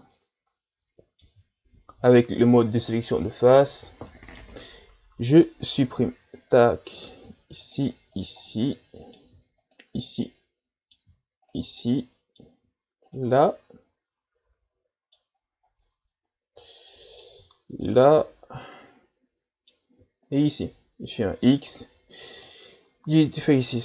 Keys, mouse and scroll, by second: 0.1-1.7 middle drag, 1.7 ctrl+Tab, 3.7-4.1 ctrl+scroll down 3, 4.1-5.6 middle drag, 5.6 right click, 6.6-7.6 middle drag, 7.6 shift+right click, 8.2 shift+right click, 8.4-9.6 middle drag, 9.6 shift+right click, 10.0-11.4 middle drag, 11.4 shift+right click, 11.8-13.1 middle drag, 13.1 shift+right click, 13.4-15.3 middle drag, 15.3-15.8 scroll up 1, 15.8-17.8 middle drag, 17.8 shift+right click, 18.3-18.6 scroll up 2, 18.6-20.3 middle drag, 20.3 shift+right click, 21.2 x, 22.9 scroll down 2, 23.3-23.8 middle drag.